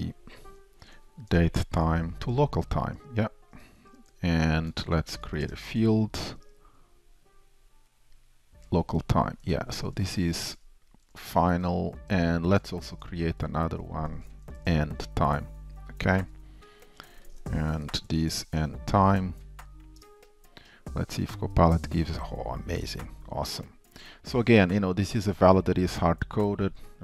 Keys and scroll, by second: 2.5 Return, 3.0 ctrl+shift+super+Return, 5.5 alt+Return, 8.7 Return, 9.7 shift+super+Down, 14.1 super+d, 17.4 shift+Return, 20.1 Return, 22.3 Tab.